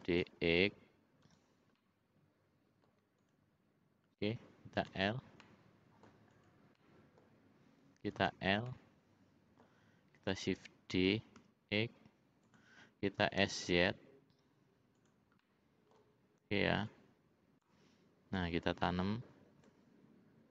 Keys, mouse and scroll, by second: 1.8-3.1 middle drag, 3.2 click, 4.8 l, 5.4 middle click, 6.3 click, 6.7 middle click, 8.2 l, 8.6-9.8 middle drag, 10.9 shift+d, 13.2 s, 15.4 middle click, 16.8 click, 18.3-19.7 drag.